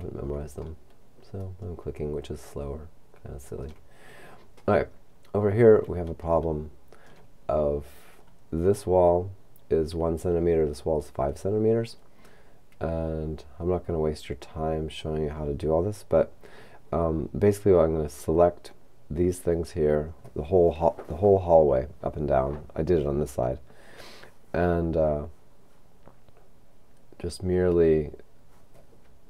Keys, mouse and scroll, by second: 1.5-4.6 shift+middle drag, 5.3-6.4 scroll up 3, 6.4 shift+middle click, 25.0-28.5 scroll down 3.